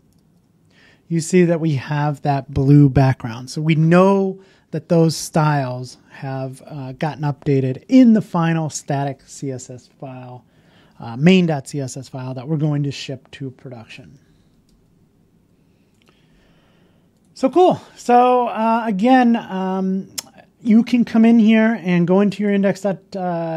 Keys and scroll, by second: 14.6 super+Tab.